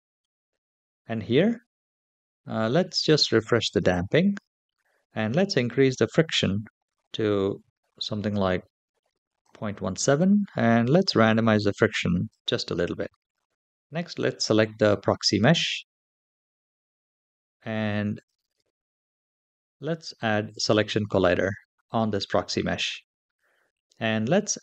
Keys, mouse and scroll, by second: 2.7-3.6 drag, 6.0-9.2 drag, 9.8-12.1 drag, 14.4 click, 18.3 /, 20.2 click.